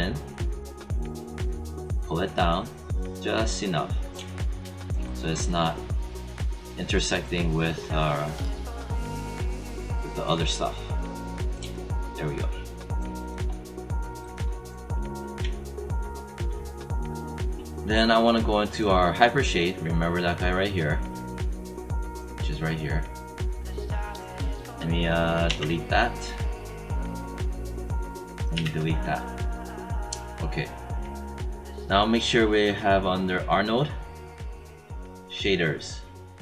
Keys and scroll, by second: 25.4 Delete, 28.5 Delete.